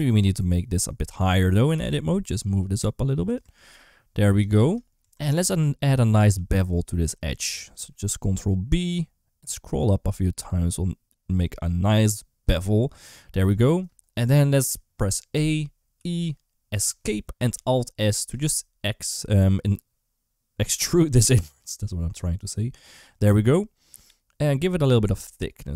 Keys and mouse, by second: 1.6 g, 3.2 Tab, 4.8 Tab, 5.1 2, 5.3 click, 6.2 2, 6.5 click, 7.6 ctrl+b, 15.2 a, 15.8 e, 17.4 alt+s.